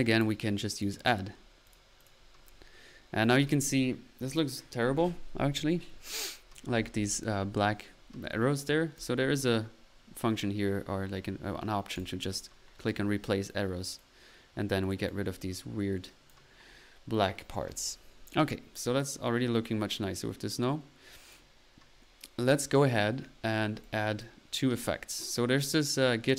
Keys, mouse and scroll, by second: 0.3 click, 1.6 drag, 8.9 click, 10.2 typing, 11.9 click, 13.4 click, 13.9 click, 14.9-15.2 drag, 15.4-16.0 middle drag, 16.0 click, 18.8 click, 26.1 typing.